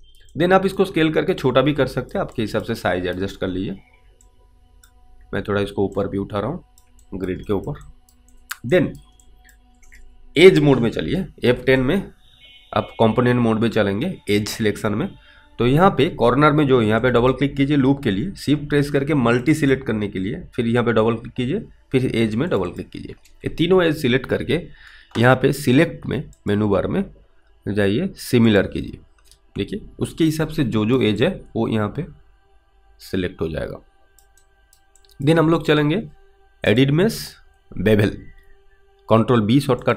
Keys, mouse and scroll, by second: 0.6 alt+click, 1.7 click, 2.6 alt+click, 4.5 click, 5.2 w, 6.2 click, 7.3 alt+right click, 7.7 alt+middle click, 8.1 alt+right click, 8.6 alt+click, 9.0 alt+right click, 9.5 alt+click, 11.5 F10, 17.1 click, 17.3 double click, 19.5 shift+click, 19.7 shift+double click, 22.5 shift+click, 22.7 shift+double click, 26.3 shift+double click, 26.5 click, 31.2 alt+right click, 31.5 alt+click, 35.4 alt+click.